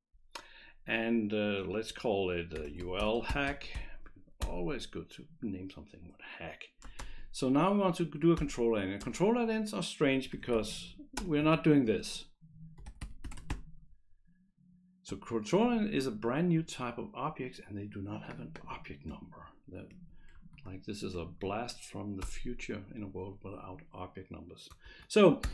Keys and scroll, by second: 2.4-4.2 typing, 4.4 Return, 7.0 ctrl+space, 7.9 Down, 8.4 Return, 9.0 space, 10.2-11.4 typing, 12.6-14.0 typing, 19.9 Delete, 20.3 Right, 21.3 End, 22.2 Return, 24.9 shift+[, 25.4 Return.